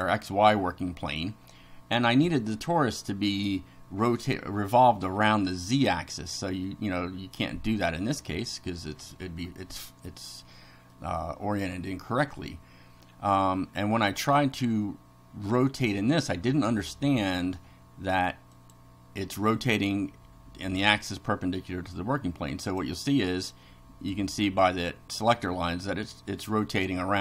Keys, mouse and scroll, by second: 10.0-11.1 middle drag, 16.5 click, 18.5 click, 22.7 click.